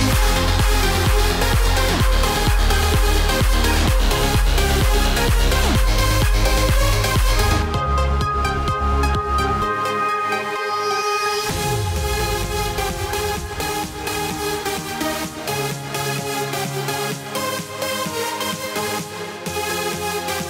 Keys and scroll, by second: 17.7 F9.